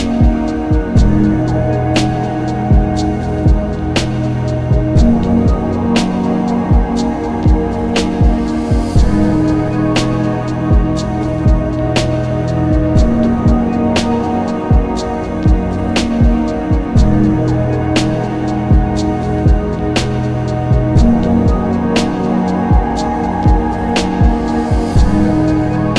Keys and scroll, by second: 1.0-1.9 typing, 8.4 b, 8.6 d, 8.8 s, 16.3 b, 16.6 s, 16.7 t, 18.9 ctrl+z, 20.3 ctrl+z, 25.3 s.